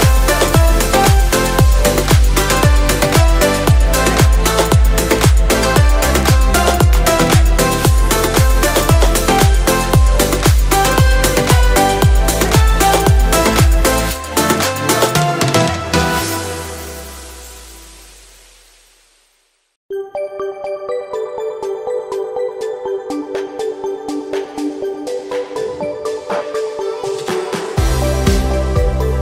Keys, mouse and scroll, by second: 4.7 click, 5.2-6.6 middle drag, 6.6 Tab, 7.0-7.8 scroll up 1, 8.0 KP_1, 8.9 shift+middle click, 9.6 scroll up 2, 10.5 1, 10.9 click, 11.5 ctrl+click, 12.4 s, 13.2 z, 13.2 0, 16.8-18.1 drag, 19.4-21.4 middle drag, 21.4 click, 22.3 KP_1, 23.2 click, 24.8 click, 25.4 click, 26.7-28.4 middle drag, 29.0 3.